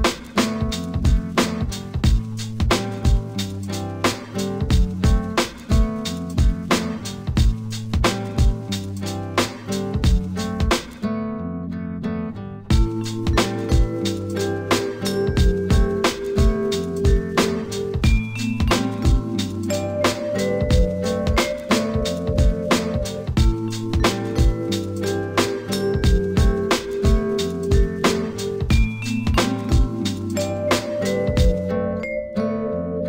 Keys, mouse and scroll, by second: 1.5 Tab, 2.4-3.1 scroll up 3, 4.3-6.3 drag, 8.7 s, 11.0 ctrl+r, 15.1 Tab, 16.6-19.6 drag, 20.8-23.2 right drag, 23.2-24.6 drag, 24.6 Tab, 26.1 click, 28.4 click, 29.5 s.